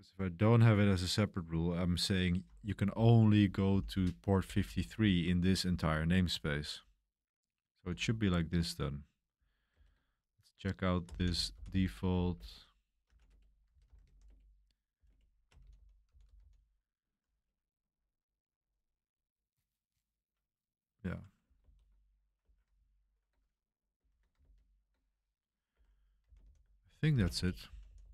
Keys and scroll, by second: 2.7-6.7 typing, 7.7 k, 9.7 super+3, 10.9-16.9 typing, 21.6 super+3, 22.4 ⟲, 24.4 super+1, 24.7 super+1, 25.5-28.1 typing.